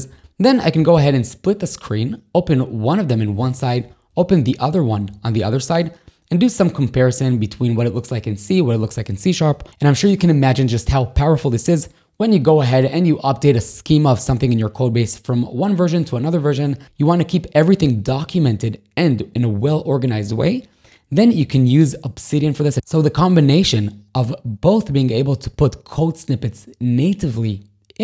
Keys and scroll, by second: 0.2 k, 1.0 shift+super+l, 2.6 ctrl+], 3.8 j, 4.4 ctrl+], 21.3 ctrl+h.